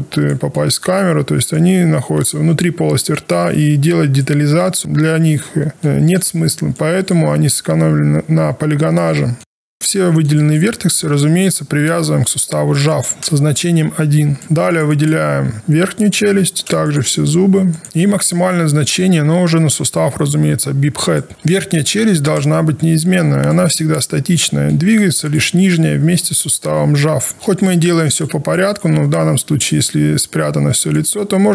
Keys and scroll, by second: 25.5 alt+1.